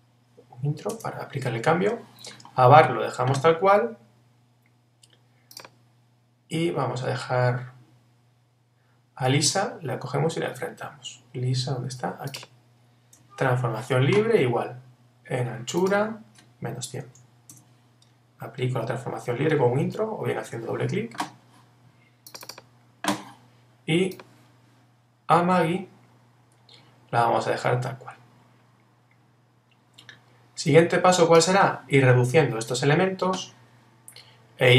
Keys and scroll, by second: 13.5 super+t, 17.5 Return.